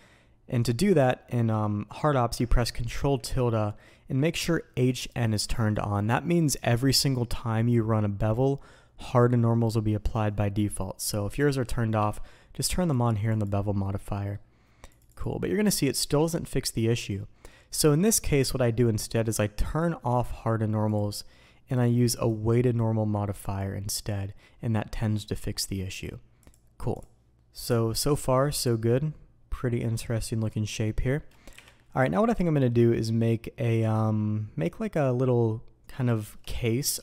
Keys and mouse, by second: 23.5-37.0 drag.